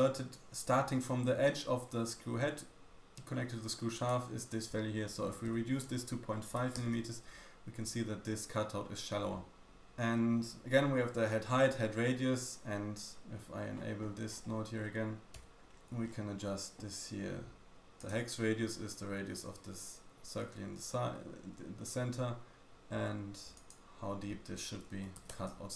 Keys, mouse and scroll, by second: 5.3 BackSpace, 5.5 BackSpace, 13.7-15.6 scroll down 5, 15.6 click, 15.6-17.7 scroll up 10, 15.6 m, 17.9-25.7 drag, 17.9-25.7 middle drag, 17.9-25.7 right drag.